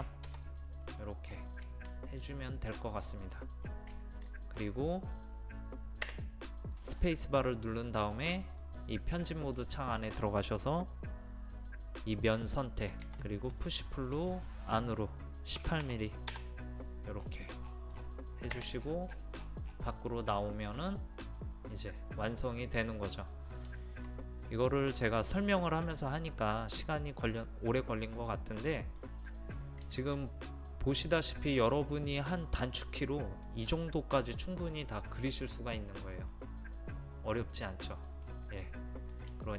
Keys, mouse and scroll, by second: 1.0-1.3 scroll down 1, 1.7 shift+middle click, 3.0-3.3 scroll up 1, 3.7-4.0 scroll up 1, 4.4 scroll up 1, 6.6 space, 8.3 click, 13.0 p, 13.6-14.6 drag, 15.6 KP_1, 15.8 KP_8, 17.2-17.6 scroll down 1, 19.5 scroll up 1, 19.6-20.1 scroll down 1, 20.1 click, 21.3-22.6 middle drag, 23.8-29.6 shift+middle drag, 33.1-39.5 middle drag.